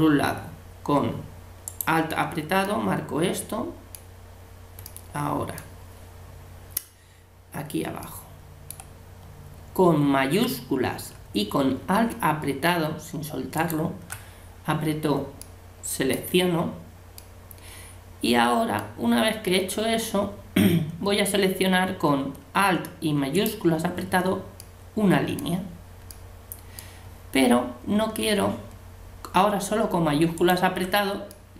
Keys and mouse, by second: 2.7 middle click, 2.9 click, 2.9 middle click, 2.9 right click, 13.6-15.4 right drag, 15.4 click, 23.3-24.9 right drag, 24.6 click, 24.9-31.5 middle drag, 30.4 right click, 31.3 click, 31.4 right click.